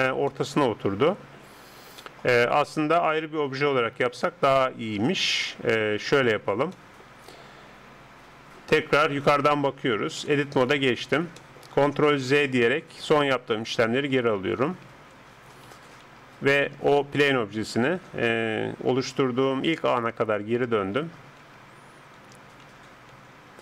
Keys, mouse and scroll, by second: 6.2-9.2 middle drag, 9.2 KP_7, 10.2 Tab, 10.6 middle click, 12.3 ctrl+z, 12.7 ctrl+z, 13.0 ctrl+z, 13.4 ctrl+z, 13.6 ctrl+z, 13.9 ctrl+z, 14.2 ctrl+z, 14.6 ctrl+z, 14.9 ctrl+z, 15.3 ctrl+z, 15.7 ctrl+z, 16.0 ctrl+z, 16.8 ctrl+z, 17.2 ctrl+z, 17.9 ctrl+z, 18.3 ctrl+z, 19.1 ctrl+z, 19.7 ctrl+z, 20.2 ctrl+z, 20.8 ctrl+z, 21.4 ctrl+z, 22.2 ctrl+z, 22.6 ctrl+z, 23.1 ctrl+z.